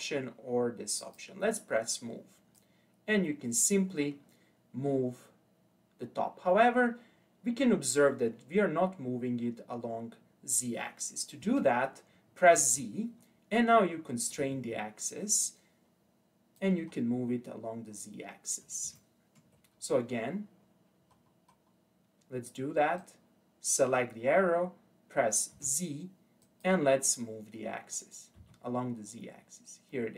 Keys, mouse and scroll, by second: 1.0-2.8 drag, 13.7 click, 17.0-17.9 scroll down 3, 17.9-18.4 scroll up 2, 18.4-19.0 scroll down 1, 19.0-19.8 ctrl+middle drag, 19.8-21.1 scroll up 8, 21.1-23.0 scroll down 4, 23.0 click, 25.5 z, 27.0 click.